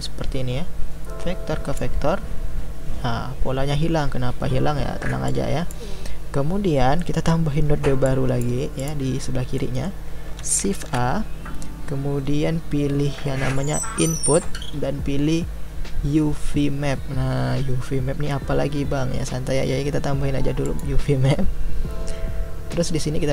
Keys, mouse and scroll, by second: 8.8-20.8 drag.